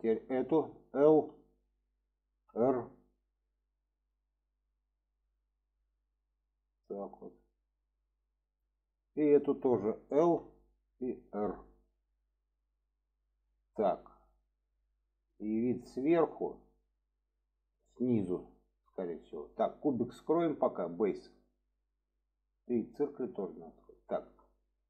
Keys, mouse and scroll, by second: 9.1 click, 13.8-18.5 middle drag, 21.9 click, 23.4 click, 24.1 shift+middle drag.